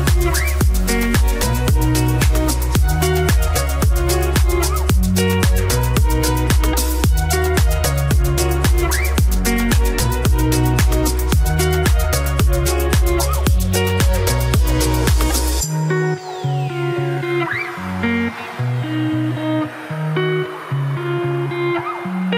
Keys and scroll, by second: 11.5 ctrl+t.